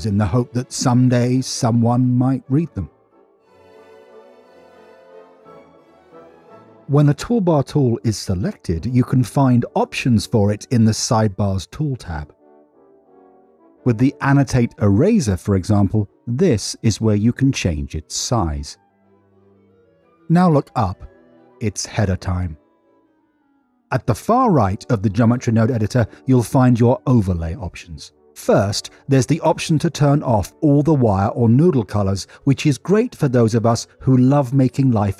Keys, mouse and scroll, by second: 0.2 click, 0.3 click, 0.7 drag, 1.0 click, 2.2 click, 2.7 click, 3.1 click, 3.2 click, 3.5 click, 4.7 click, 6.7-7.6 drag, 8.2 click, 11.5 n, 13.1 click, 20.5 n, 22.6 middle click, 23.5 middle click, 24.5 w, 27.9-35.1 drag.